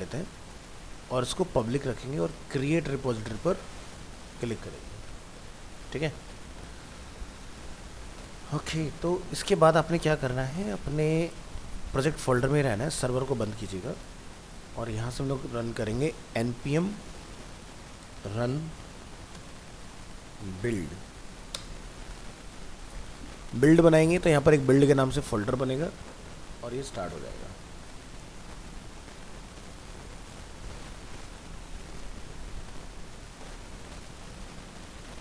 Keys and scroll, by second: 14.0 ctrl+c.